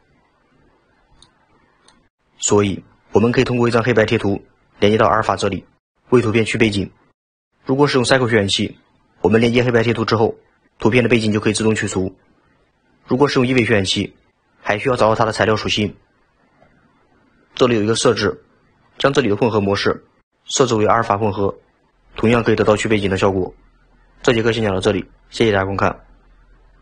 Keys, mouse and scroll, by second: 0.6-1.2 scroll down 9, 1.2-2.6 middle drag.